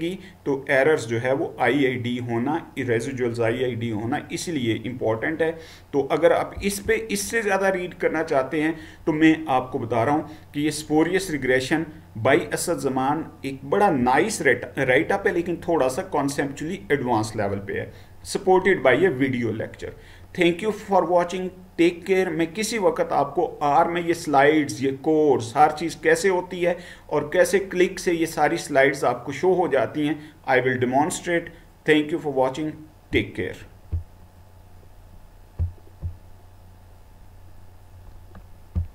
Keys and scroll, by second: 6.5 Down.